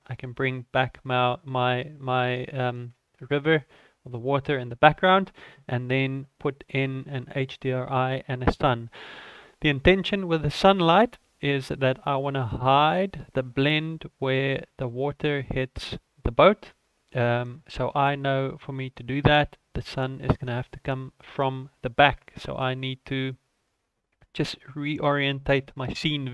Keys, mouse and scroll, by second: 7.1 right click, 10.4 ctrl+s, 21.6-22.8 scroll down 12, 23.0 shift+middle click.